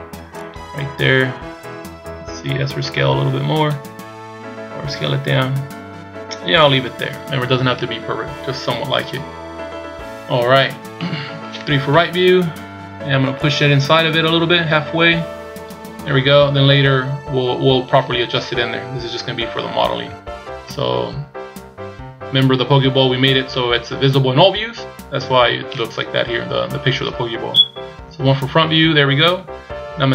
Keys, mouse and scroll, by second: 2.4 s, 4.6 s, 9.4 scroll down 2, 11.0 middle click, 11.9 KP_3, 13.5 click, 20.0 z, 20.7 z, 21.6-23.2 scroll down 1, 27.8 KP_1, 28.7-29.3 scroll up 2, 29.3-30.1 scroll down 1.